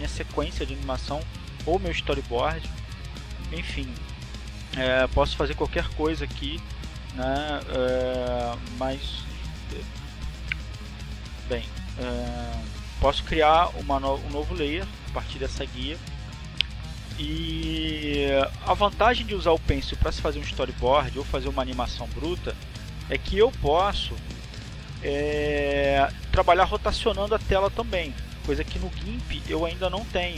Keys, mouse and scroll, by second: 2.1 click, 14.7 click, 16.1 click, 21.2 click, 24.6 click.